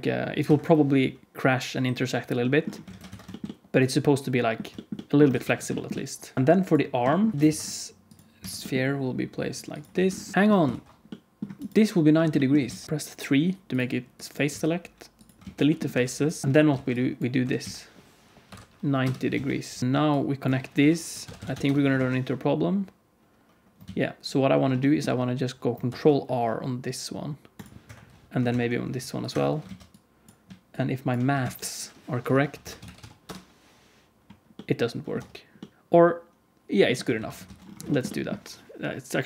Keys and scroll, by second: 2.2 ctrl+super+r, 2.8 alt+a, 3.1 ctrl+s, 5.3 ctrl+s, 6.3 Tab, 6.3 alt+a, 6.3 ctrl+s, 6.3 alt+z, 7.3 alt+a, 7.3 g, 7.4 ctrl+s, 8.4 shift+d, 9.9 alt+z, 10.7 ctrl+s, 12.6 alt+z, 12.8 1, 14.4 x, 15.3 alt+z, 15.8 2, 16.4 ctrl+z, 16.7 alt+a, 17.4 r, 19.3 alt+z, 19.8 alt+z, 20.7 F3, 21.9 alt+z, 23.8 ctrl+z, 25.8 ctrl+r, 28.4 ctrl+r, 29.6 alt+z, 31.3 alt+z, 32.2 F3, 35.1 Tab, 37.1 alt+a, 37.4 ctrl+s.